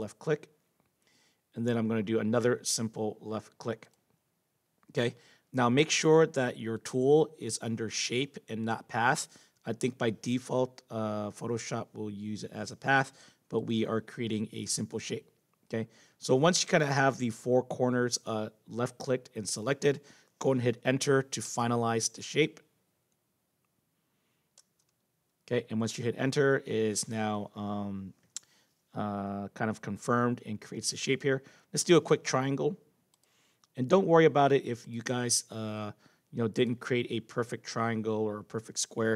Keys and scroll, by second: 21.4 Return, 24.5 Return.